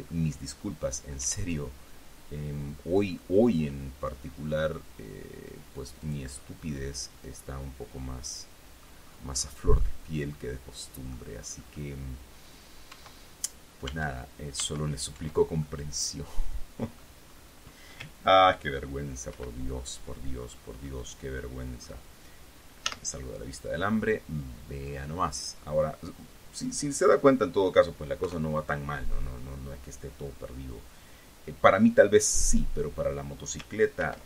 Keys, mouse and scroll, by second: 0.9 scroll up 1, 1.6 e, 6.4 click, 6.7 scroll down 1, 7.0-9.4 middle drag, 10.1-11.6 middle drag, 11.7-12.4 scroll up 1, 13.2 Tab, 14.2 Tab, 14.9 Tab, 16.0-17.5 middle drag, 17.6 scroll up 1, 19.7 ctrl+2, 20.8 ctrl+scroll down 1, 21.2-22.4 drag, 23.2 z, 24.1-24.9 scroll up 4, 25.2 scroll down 2, 28.6 KP_3.